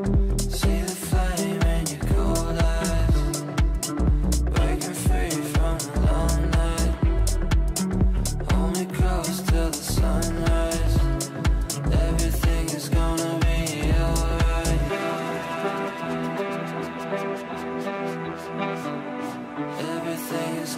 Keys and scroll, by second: 13.7 ctrl+z.